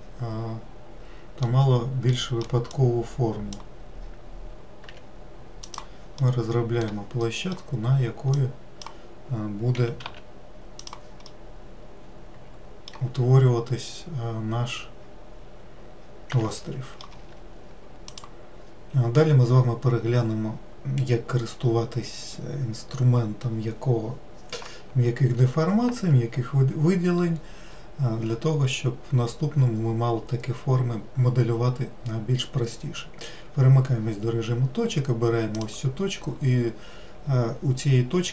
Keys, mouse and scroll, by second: 3.0 click, 5.2 g, 6.5-8.6 middle drag, 8.6-10.1 drag, 10.1 g, 11.6-16.5 middle drag, 36.0-38.3 drag.